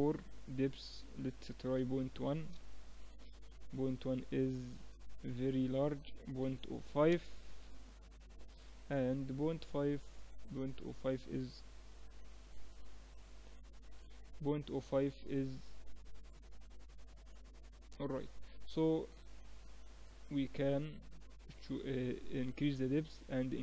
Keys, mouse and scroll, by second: 0.2-2.1 drag, 5.3-7.2 drag, 8.4-12.6 middle drag, 12.6 KP_Decimal, 13.8 KP_1, 19.4-23.3 drag.